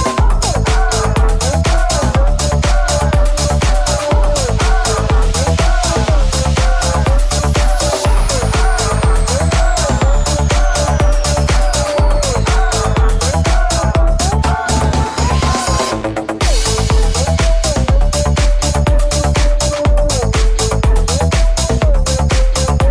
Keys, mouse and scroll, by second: 3.0 c, 9.7-12.9 drag, 10.4 shift+a, 13.2 g, 14.1-17.5 middle drag, 17.4 click, 17.4 0, 17.6-22.9 ctrl+drag, 17.6-22.0 ctrl+middle drag.